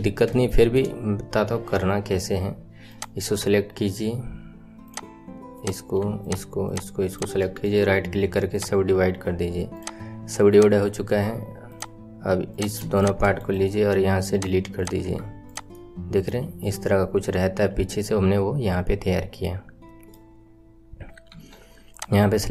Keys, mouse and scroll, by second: 1.0-2.7 scroll up 1, 2.7 scroll up 1, 2.8 click, 4.8 click, 6.1 shift+click, 6.6 shift+click, 7.0 shift+click, 8.5 right click, 9.7 click, 10.4 click, 11.6 click, 12.9 shift+click, 13.3 right click, 14.7 click, 15.1 Tab, 15.4 click, 15.7 middle click, 16.5 scroll down 4, 16.7-19.8 middle drag, 21.2 KP_1, 21.8 click.